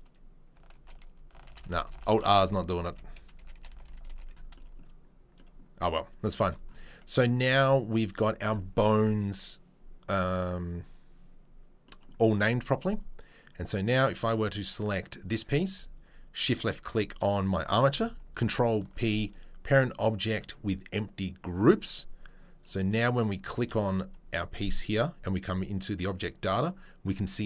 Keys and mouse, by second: 0.7 alt+r, 1.4 alt+r, 1.9 alt+r, 2.4 alt+r, 2.8 a, 3.4 alt+r, 3.5 alt+r, 3.8 alt+r, 4.0 alt+r, 6.0 click, 6.1-13.0 shift+middle drag, 8.0 Tab, 13.0 click, 13.4-16.4 middle drag, 16.4 shift+click, 16.5-23.1 shift+middle drag, 18.4 ctrl+p, 23.1 click, 23.6-25.7 shift+middle drag, 25.7 click, 25.8 middle click, 26.0 click, 26.2-27.4 middle drag.